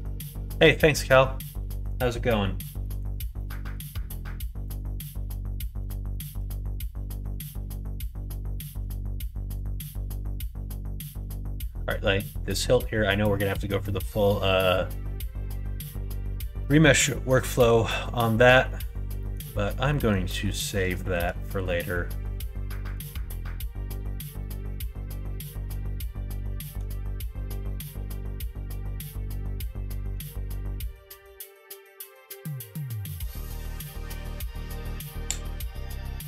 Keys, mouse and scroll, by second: 0.2 shift+middle click, 0.6 middle click, 1.1 middle click, 1.6 middle click, 2.7 middle click, 3.3 shift+middle click, 4.0 middle click, 4.5 shift+middle click, 5.5 middle click, 6.0 shift+middle click, 6.5 Tab, 7.2 alt+z, 7.6 middle click, 8.1 shift+middle click, 8.4 shift+middle click, 9.4 click, 9.7 middle click, 10.4 middle click, 10.7 middle click, 16.5 middle click, 17.4 middle click, 19.1 middle click, 19.8 middle click, 20.4 middle click, 20.9 shift+middle click, 21.6 middle click, 22.6 middle click, 23.3-26.7 middle drag.